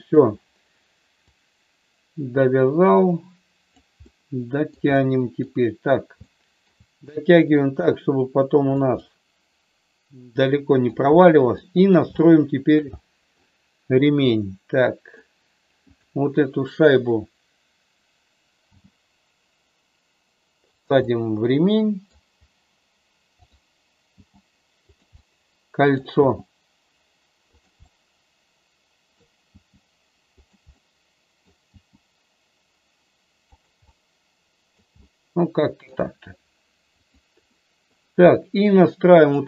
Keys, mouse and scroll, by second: 1.1-3.7 drag, 4.0 middle click, 4.9 middle click, 6.2 shift+middle click, 7.6-8.7 drag, 8.8-10.8 middle drag, 11.6 middle click, 12.1 shift+middle click, 13.0 middle click, 14.4 middle click, 18.7 g, 21.0-22.1 middle drag, 23.4 click, 24.0 g, 24.9 click, 25.1 middle click, 26.1 g, 27.9-29.1 middle drag, 29.5 g, 30.3 click, 30.7 middle click, 31.7 g, 33.9-34.9 middle drag, 35.0 middle click, 37.0 click, 37.5 middle click, 38.4 middle click, 39.2-39.4 drag.